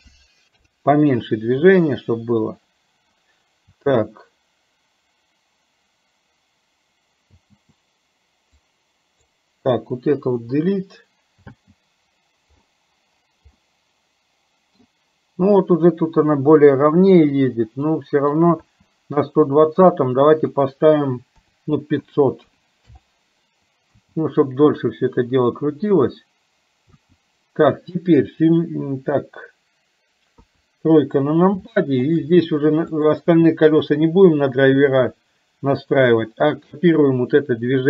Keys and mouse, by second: 3.8 space, 7.4 space, 8.7 click, 10.3 Delete, 11.6 space, 13.6-14.9 middle drag, 17.9 middle click, 18.6 space, 20.6-22.9 drag, 23.9 space, 30.4 KP_3, 31.8 middle click, 32.9 click.